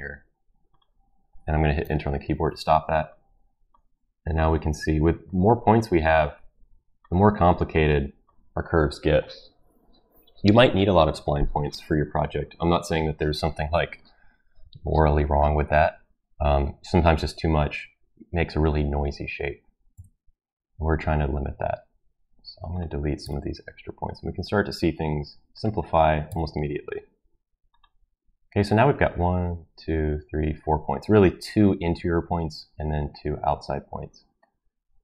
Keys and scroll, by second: 1.8 Return, 19.9 Delete, 23.2 Delete, 26.3 Delete.